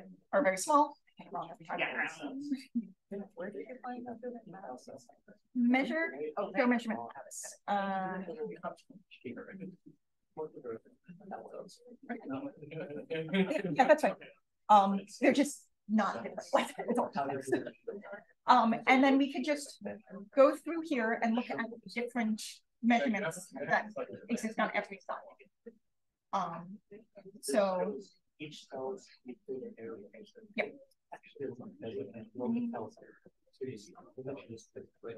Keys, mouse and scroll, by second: 0.2 d, 1.1-1.6 drag, 2.6-3.7 drag, 4.0 click, 4.5 d, 23.6-25.1 drag, 27.8-29.3 drag, 32.1 click, 34.2-35.1 drag.